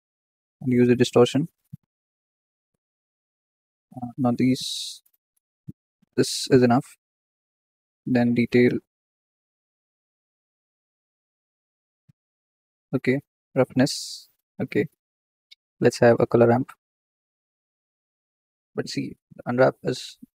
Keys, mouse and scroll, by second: 2.1-3.3 middle drag, 2.6-4.1 drag, 4.1 ctrl+z, 4.7-10.0 drag, 13.1-18.3 drag, 17.5 shift+a.